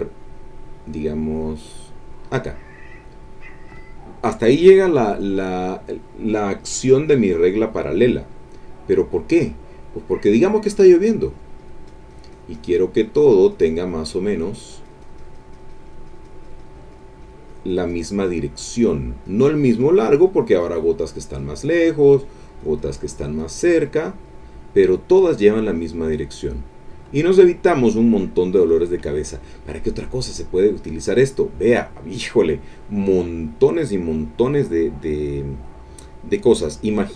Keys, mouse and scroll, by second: 2.2 click, 7.1 click, 11.2-17.2 drag, 17.2-18.5 drag, 18.6 click, 18.9 click, 19.3 click, 19.6-23.8 drag, 23.9 click, 29.4 middle click, 29.9 click, 30.5 middle click, 30.6-33.2 drag, 33.2-34.6 middle drag.